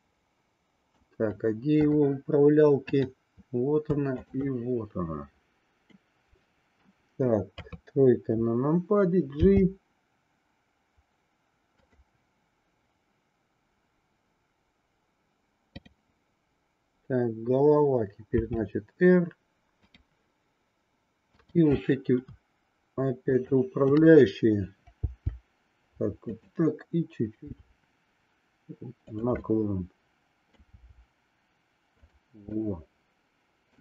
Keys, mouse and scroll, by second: 0.2 middle click, 2.9 click, 6.0 middle click, 7.5 KP_3, 9.4 g, 18.2 r, 21.4-22.7 drag, 23.2-24.4 shift+drag, 25.0 g, 27.4 r, 29.4-30.7 middle drag, 30.9 r, 32.5-33.8 middle drag.